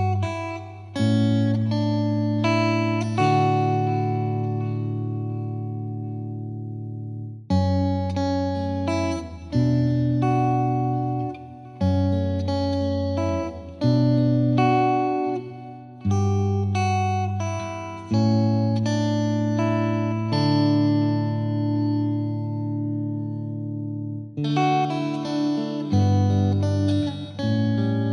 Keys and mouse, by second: 1.5 click, 3.2 click, 5.2-6.5 drag, 7.0 click, 9.4 click, 11.1 click, 11.9 click, 13.9 click, 19.2 click, 20.7-21.9 drag, 22.0-23.2 drag, 27.5 click.